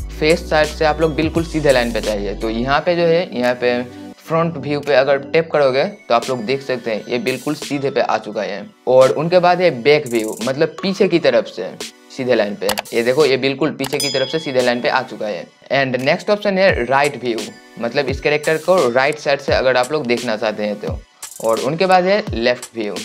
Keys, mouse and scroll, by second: 5.1 click, 11.2 click, 12.1 click, 17.7-23.0 drag.